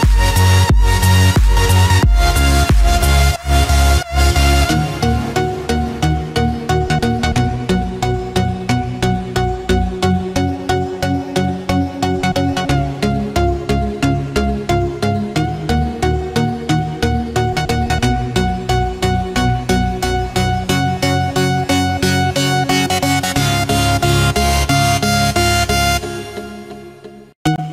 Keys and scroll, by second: 12.2 ctrl+-, 13.0 ctrl+=, 23.9 ctrl+-, 27.3 ctrl+z.